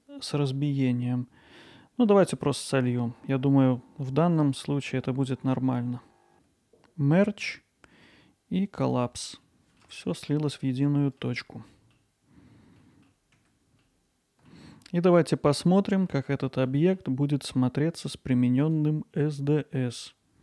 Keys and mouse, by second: 6.3-9.5 right drag, 6.3 1, 9.5-9.8 middle drag, 10.4-11.2 alt+middle drag, 11.7 middle click, 12.8 alt+middle click, 13.4 Tab, 13.8 alt+middle click, 14.9-16.0 middle drag, 16.9 middle click, 18.6-20.4 drag.